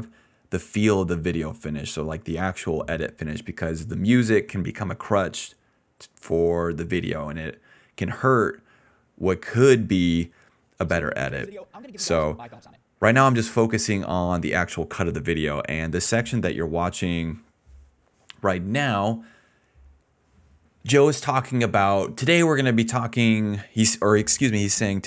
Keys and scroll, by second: 10.6 space, 12.7 space, 13.1 s, 19.1-19.9 typing.